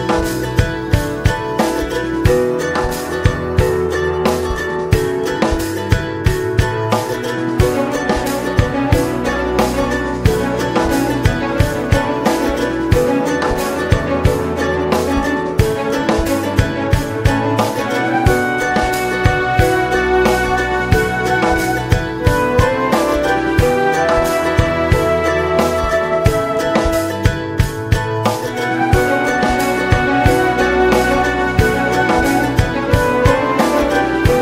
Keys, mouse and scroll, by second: 0.8 middle click, 1.0 space, 2.1-3.3 middle drag, 3.3 space, 3.9 click, 4.5 middle click, 5.3 alt+middle click, 6.0-7.0 scroll down 1, 7.0 r, 11.4-12.6 drag, 12.8 r, 16.1-23.6 drag, 23.6 ctrl+z, 24.3 r, 26.8 ctrl+s, 27.2-27.7 scroll up 3, 27.7 middle click, 28.7 space, 30.0 space, 31.3 alt+middle click, 31.8 alt+middle click, 32.5 click, 32.7 scroll down 2, 33.2 click, 33.5 scroll down 1, 34.2 click.